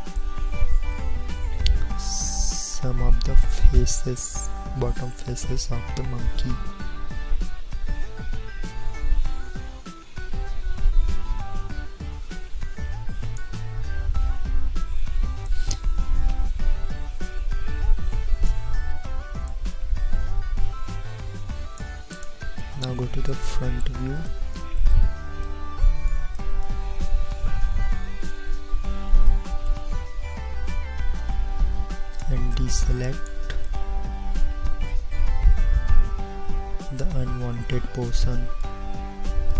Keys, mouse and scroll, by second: 22.3-25.7 middle drag, 27.8 KP_1, 30.4 c.